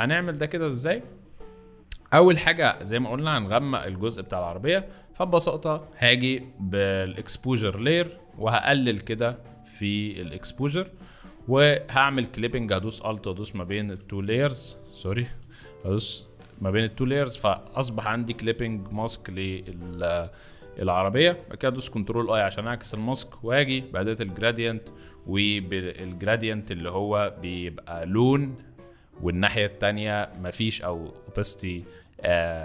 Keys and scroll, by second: 13.7 ctrl+alt+z, 14.3 z, 14.9 z, 15.3 a.